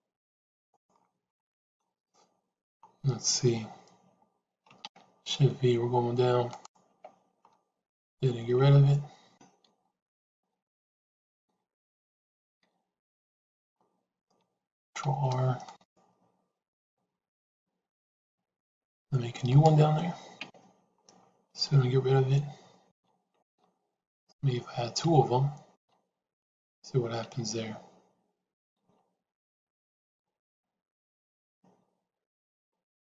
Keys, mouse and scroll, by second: 1.2 middle click, 1.8-2.6 scroll down 1, 2.6-4.5 scroll down 1, 4.7 shift+v, 6.8 Tab, 11.2 ctrl+z, 12.0 ctrl+z, 12.3 ctrl+z, 12.7 ctrl+z, 14.9 ctrl+r, 20.3 Tab, 23.7 ctrl+z, 24.5 ctrl+z, 24.7 ctrl+z, 25.0 ctrl+z, 26.4 ctrl+z, 28.0 ctrl+z, 29.4 ctrl+z, 30.7 ctrl+z.